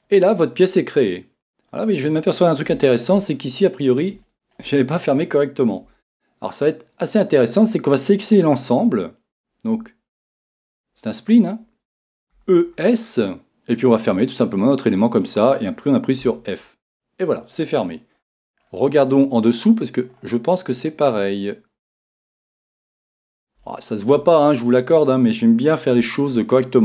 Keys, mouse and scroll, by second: 5.9 Tab, 6.6 scroll up 1, 7.1-12.4 drag, 12.4 e, 15.3 click, 16.3 f, 17.1-26.2 middle drag, 26.2-26.8 right drag.